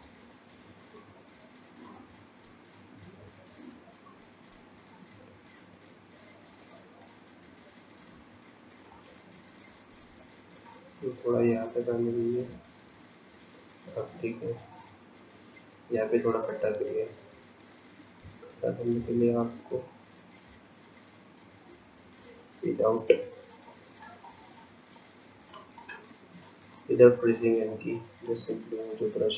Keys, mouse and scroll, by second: 1.6-2.3 scroll down 6, 2.7-4.2 scroll down 4, 5.9-7.7 scroll up 7, 7.8-8.9 scroll up 4, 8.9 shift+click, 12.8-13.9 scroll down 9, 14.2-14.9 scroll up 5, 15.4-16.7 scroll up 4, 16.7-19.0 scroll up 1, 20.0 ctrl+click, 20.9 click, 21.7 click, 22.4 ctrl+click, 23.8 click, 25.0 click, 25.8 click, 27.7 click, 28.3 click.